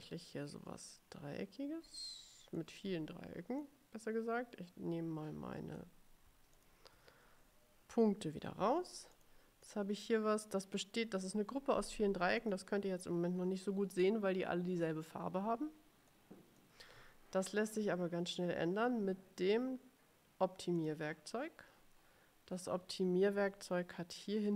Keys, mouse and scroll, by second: 0.4-2.9 ctrl+drag, 3.8-6.1 drag, 6.7 shift+click, 8.7 Delete, 9.3 click, 9.8-11.1 drag, 12.5 click, 16.2 click, 20.9 click.